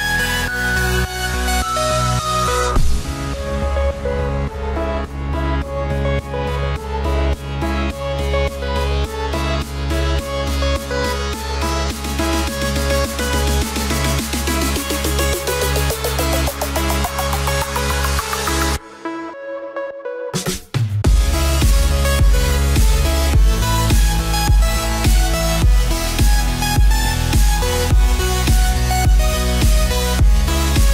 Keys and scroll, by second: 15.4 ctrl+j, 17.7 ctrl+j.